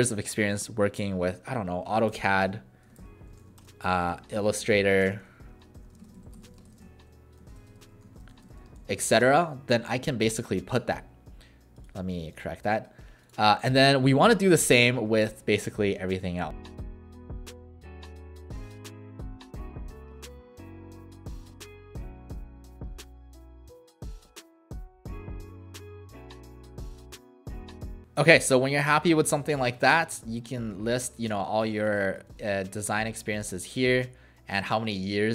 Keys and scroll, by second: 1.7-9.1 typing, 14.0 typing, 17.7-28.4 typing, 22.4 Return, 24.6 Right, 24.7 Right, 24.7 Right.